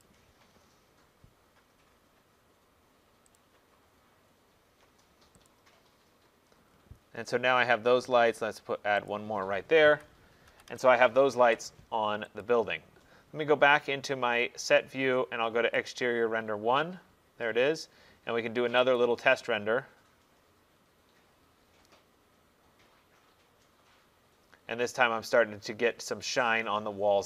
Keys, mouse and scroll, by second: 0.1 click, 2.0 middle click, 3.4 click, 3.7 middle click, 4.4 middle click, 5.5 click, 6.7 middle click, 6.7 middle click, 8.0 middle click, 8.7 middle click, 9.1 click, 9.9 Escape, 10.5 Escape, 10.7 Escape, 12.5 click, 15.9 click, 19.0 click.